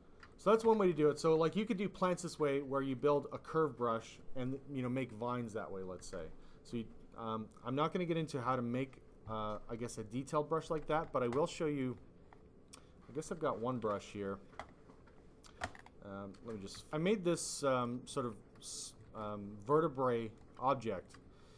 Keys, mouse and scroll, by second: 0.4 alt+click, 0.6 alt+click, 2.7 click, 6.3 click, 8.4 ,, 11.7 click, 13.0 click, 13.8 super+e, 15.7 scroll down 2, 17.4 click, 18.1 f, 18.6 click, 19.1 f, 20.0 click, 20.8 alt+click.